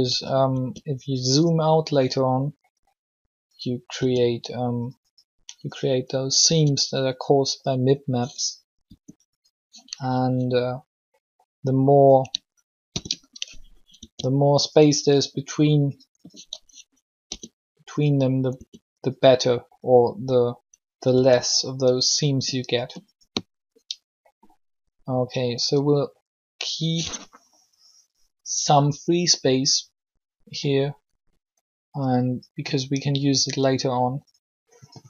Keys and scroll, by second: 0.5 s, 3.9 s, 6.4 s, 8.8 r, 12.8 ctrl+l, 13.9 s, 17.2 s, 18.5 s, 21.1 s.